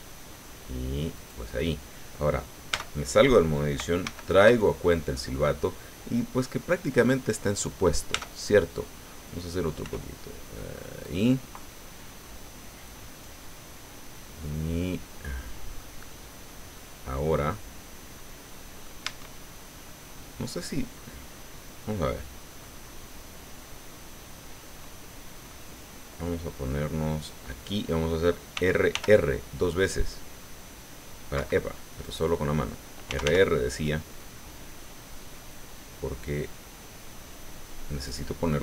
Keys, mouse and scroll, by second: 1.1 click, 2.7 Tab, 4.0 alt+h, 8.1 Tab, 9.8 r, 11.0 click, 11.6-15.9 drag, 16.7-19.0 drag, 19.0 Tab, 25.5-27.8 drag, 28.5 r, 31.3 Escape, 32.0 right click, 33.1 r, 38.0 click.